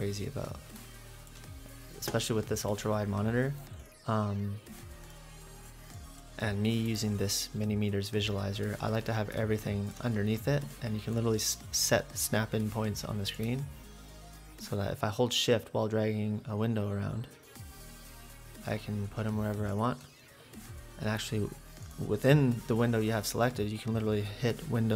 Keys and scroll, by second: 6.9 F8.